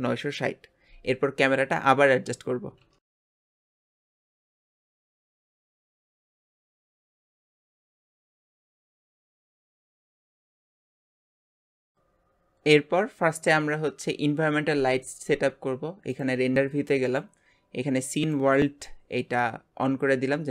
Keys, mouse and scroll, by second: 16.1 click, 17.2-20.5 drag.